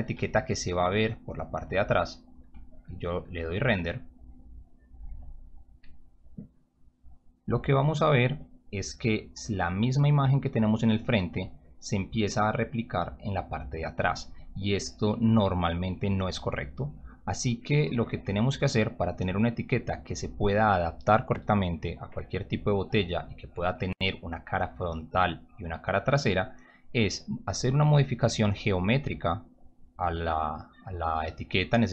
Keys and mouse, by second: 4.6 click.